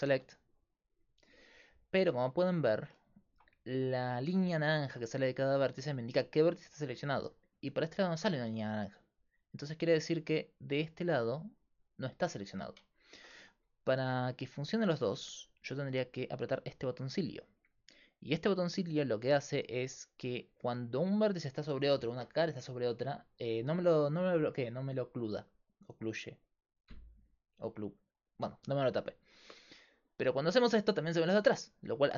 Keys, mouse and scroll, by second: 0.1 b, 1.7-2.8 middle drag, 3.7-9.2 middle drag, 9.9 g, 13.0 middle click, 13.2-16.6 middle drag, 13.4 a, 19.2 middle click, 20.2-25.2 middle drag.